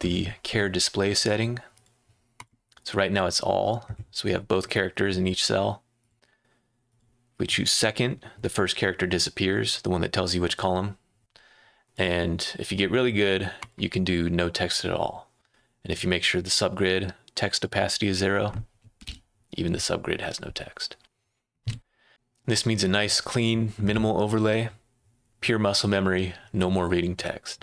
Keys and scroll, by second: 18.7-19.5 typing, 21.6 ⟲, 22.1 Escape.